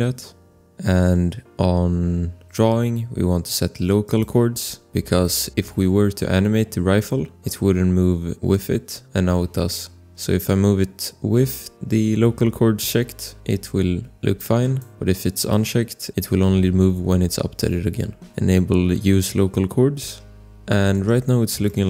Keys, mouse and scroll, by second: 2.2 click, 5.0 scroll, 5.2 click, 5.6 scroll, 8.5 click, 10.1 ctrl+z, 10.4 click, 15.4 click, 16.1 click, 17.9-18.9 scroll, 18.9 scroll, 20.9 click, 21.6 click.